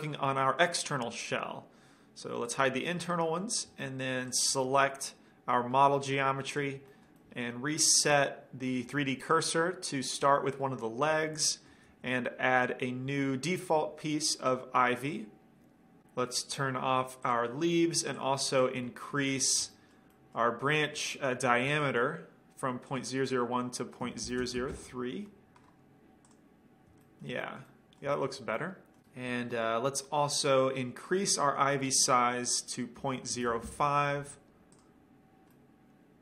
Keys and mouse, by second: 2.6-3.7 drag, 4.5-6.3 drag, 4.8-6.3 middle drag, 6.7 drag, 6.7-8.8 middle drag, 6.7-8.6 right drag, 7.1 click, 9.5-10.3 middle drag, 11.3-12.0 middle drag, 12.0 shift+a, 17.4-19.8 drag, 19.2-20.5 middle drag, 24.5 KP_0, 27.2-29.8 middle drag, 30.0 middle click, 31.2-36.2 drag, 35.7-36.2 middle drag.